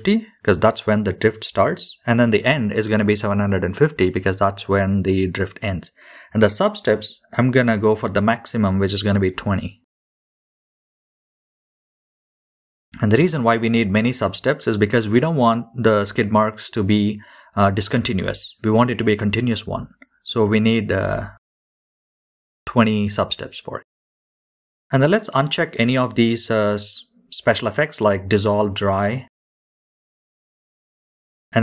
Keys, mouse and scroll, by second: 0.4-3.7 drag, 4.6-7.1 drag, 15.5 scroll down 2, 16.2-18.9 scroll down 3, 21.0 click, 21.7-24.0 scroll down 2, 24.4 drag, 24.8-26.0 scroll down 7, 28.9-31.6 drag.